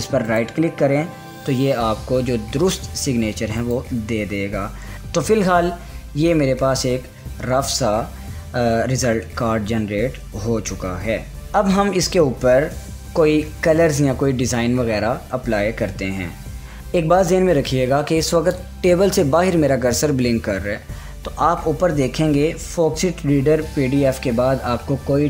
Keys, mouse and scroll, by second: 0.9 right click, 4.2 click, 4.9 scroll up 1, 5.1-5.6 scroll, 6.1 scroll up 1, 9.6-9.9 scroll, 10.2-10.9 scroll up 2, 11.3 Return, 14.6-14.9 scroll down 1.